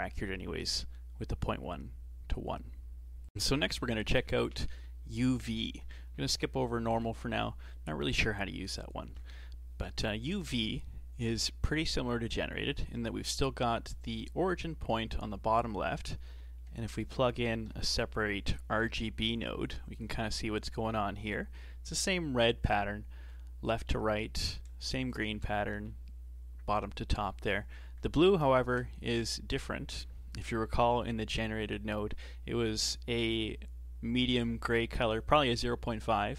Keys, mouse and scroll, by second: 7.0 ctrl+shift+click, 8.8 ctrl+shift+click, 16.8 shift+a, 25.2 ctrl+shift+click, 28.6 ctrl+shift+click.